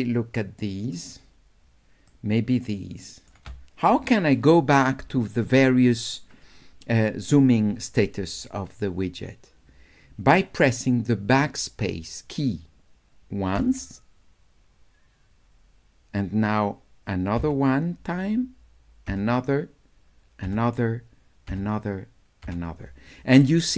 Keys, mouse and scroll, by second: 0.2 shift+right click, 0.6 shift+click, 2.1-3.3 shift+right drag.